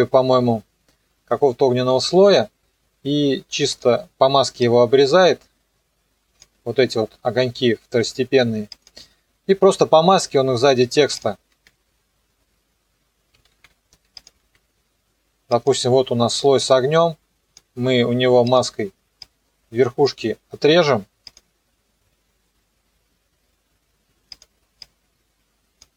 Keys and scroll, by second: 11.5 ctrl+d, 13.5 ctrl+z, 14.4 ctrl+d.